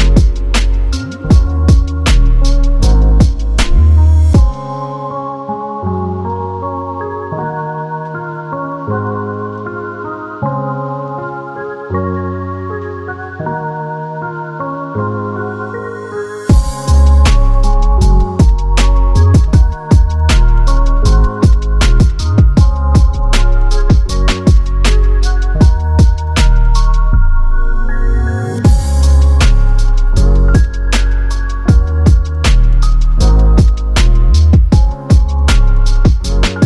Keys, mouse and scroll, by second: 1.4 u, 2.6 click, 6.1 click, 9.1 space, 11.8 space, 13.3 click, 30.9 click.